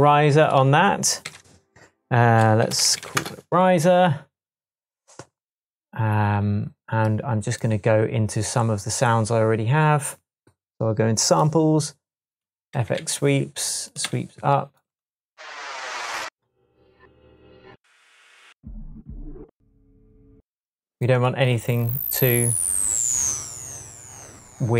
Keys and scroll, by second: 1.2 r, 2.4-3.5 typing, 12.7 Down, 12.9 Right.